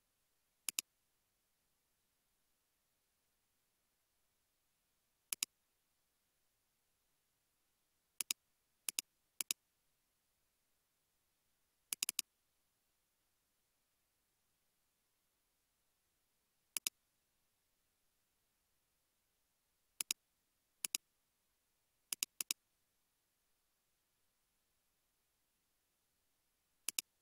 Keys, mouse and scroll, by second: 9.5 double click, 10.9 scroll up 1, 12.1 double click, 13.2-15.0 typing, 16.0 scroll down 1, 17.7-21.4 scroll up 1, 22.5 double click, 23.2 space, 24.9 space.